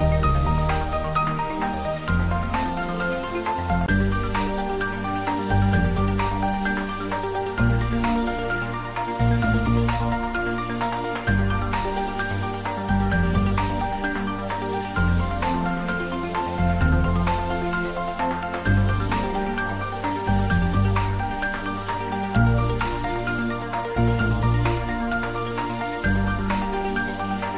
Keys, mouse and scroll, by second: 0.7 click, 3.9 Tab, 4.4 click, 10.4-11.0 scroll down 1, 11.0-11.6 middle drag, 12.9-14.7 scroll down 1, 15.5-16.4 typing, 17.0 click, 17.6 ctrl+s, 18.3-18.6 scroll down 1, 18.6-19.2 middle click, 19.2 scroll up 1, 21.7-22.7 click, 23.8-24.7 right click, 24.8 click, 26.4-27.4 right click.